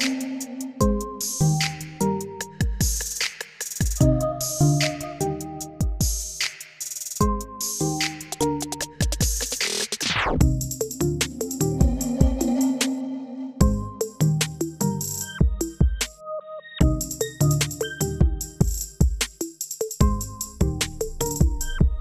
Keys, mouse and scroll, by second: 0.0 g, 1.5 scroll down 3, 1.7-3.2 middle drag, 3.2 click, 4.5-8.8 drag, 20.4-22.0 drag.